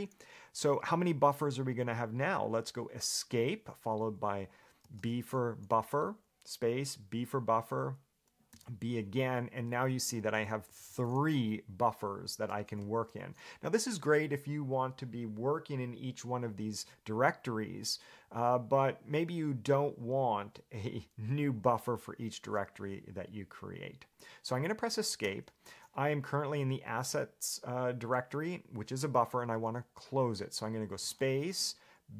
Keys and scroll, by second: 2.8 Escape, 9.9 ctrl+j, 10.6 ctrl+k, 10.9 ctrl+j, 11.1 ctrl+j, 13.0 space, 25.4 Escape.